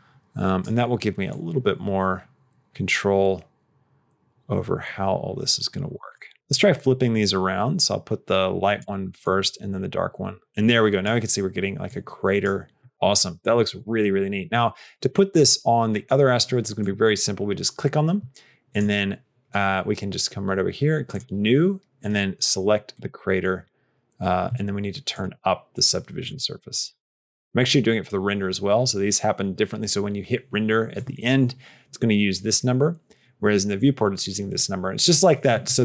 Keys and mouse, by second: 1.3-6.0 drag, 6.3 click, 7.0-8.7 drag, 9.2-10.9 drag, 11.9 click, 12.9 click, 18.5 click, 21.0 click, 21.9 click, 25.0 click.